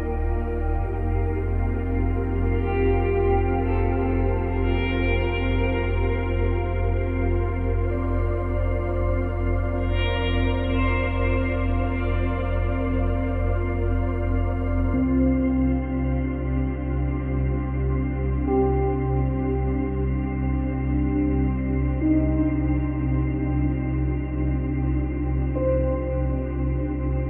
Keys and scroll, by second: 3.8 space, 5.5 space.